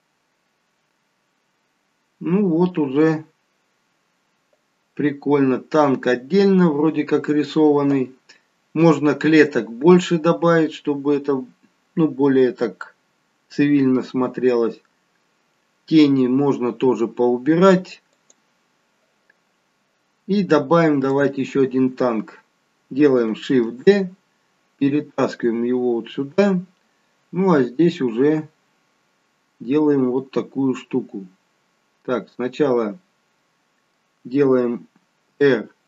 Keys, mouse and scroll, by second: 20.9 click, 23.5 shift+d, 27.4-29.2 scroll down 2, 27.8 middle click, 35.1 r.